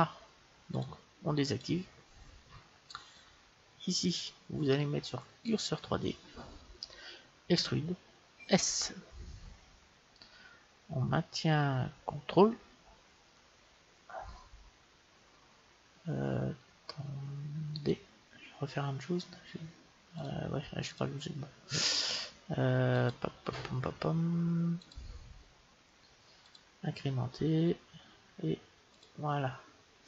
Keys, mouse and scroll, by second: 0.6-2.6 drag, 4.0-6.0 drag, 7.5 e, 20.1-22.7 drag, 24.7-26.5 drag, 28.9-30.0 drag.